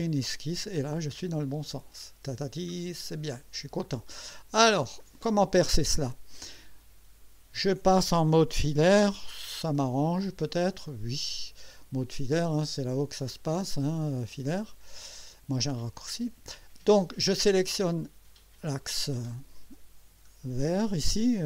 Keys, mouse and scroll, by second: 1.1 scroll up 1, 1.8 scroll up 1, 2.4-2.7 scroll up 1, 3.0-3.7 right drag, 3.6 middle click, 3.9 scroll up 1, 4.4 middle click, 4.5 right click, 4.7 middle click, 13.5 click, 15.2 click, 18.4 click, 20.6 scroll down 1.